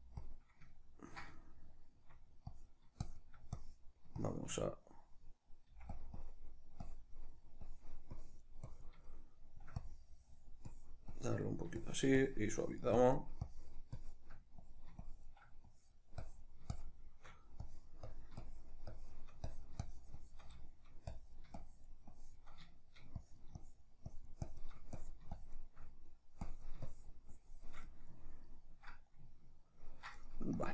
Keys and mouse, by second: 0.3 click, 0.5-2.5 middle drag, 2.5-6.1 drag, 5.7 f, 6.2-9.1 drag, 9.1 shift+middle click, 9.9-20.7 drag, 20.7 shift+middle click, 21.1-22.7 drag, 22.7 shift+middle click, 23.3-25.9 drag, 25.9 middle click, 26.5-27.9 drag, 27.9-30.6 middle drag, 30.6-30.7 drag.